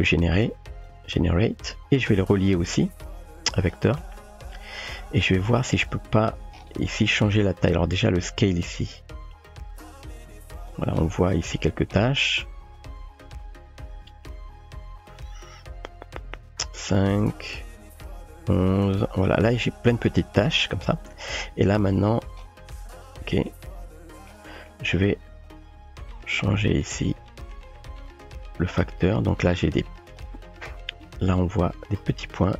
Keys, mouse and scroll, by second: 0.1-0.9 drag, 2.4-3.9 drag, 4.2 middle click, 5.8 typing, 5.8 shift+middle click, 8.2-10.7 drag, 11.8 shift+middle drag, 12.8-19.5 drag, 23.6 middle click, 24.7 middle click, 25.5-30.2 drag.